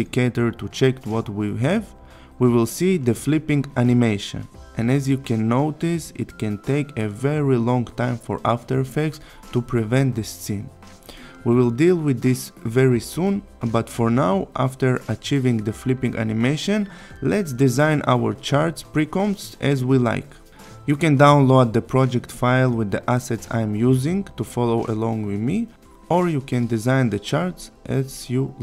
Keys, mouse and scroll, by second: 3.4-8.6 click, 15.1 click, 18.3 click, 26.5 click.